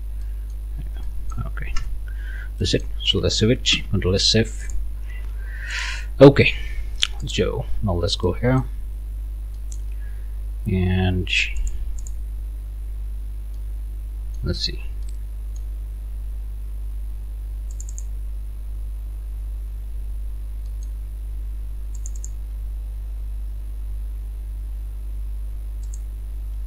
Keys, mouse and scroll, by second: 1.1 click, 1.8 Return, 2.3 scroll down 1, 2.6-3.7 drag, 3.7 ctrl+s, 4.6 click, 5.7 click, 7.3 click, 8.3 middle click, 8.7 scroll down 2, 9.1 scroll up 2, 9.6 middle click, 11.6 click, 12.0 click, 12.8-13.1 scroll up 1, 13.6-14.6 drag, 15.0 click, 17.7 click, 19.6 scroll down 1, 20.7 click, 22.0 click, 25.8 click.